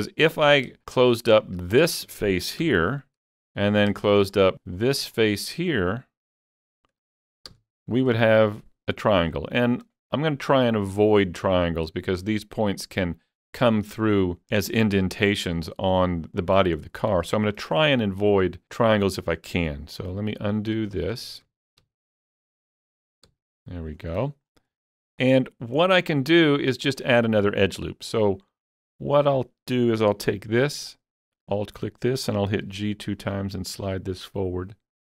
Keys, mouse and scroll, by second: 0.4 click, 0.8 shift+click, 1.3 shift+click, 1.5 shift+click, 3.0 f, 4.2 shift+click, 5.5 shift+click, 5.7 shift+click, 6.5 shift+click, 7.5 f, 9.3 scroll up 1, 11.3 scroll up 2, 16.8 scroll down 1, 19.7 scroll down 1, 20.0 ctrl+z, 20.8 ctrl+z, 21.1 ctrl+z, 21.5 ctrl+z, 21.8 ctrl+z, 22.2 ctrl+z, 22.6 ctrl+z, 22.9 ctrl+z, 23.3 ctrl+z, 24.1 scroll down 1, 24.5 scroll up 1, 25.0 shift+middle click, 25.8 scroll down 1, 26.2-28.7 shift+middle drag, 28.7-35.0 middle drag, 30.9 alt+click, 32.7 g, 32.8 g.